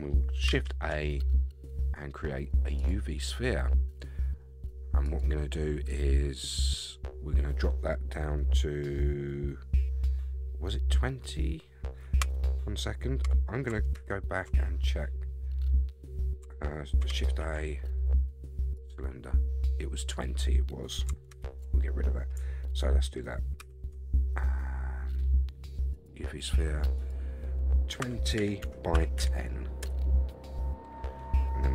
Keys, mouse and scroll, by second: 0.5 shift+a, 5.0-12.4 drag, 13.2 Escape, 13.9 ctrl+z, 17.2 shift+a, 21.3 ctrl+z, 23.6 shift+a, 27.0-30.6 drag, 30.9 scroll down 3.